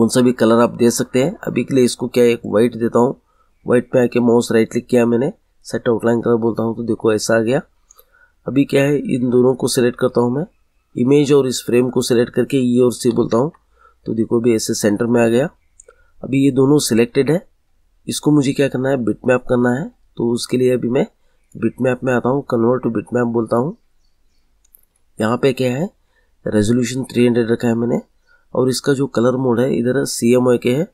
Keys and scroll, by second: 12.9 e, 13.3 c.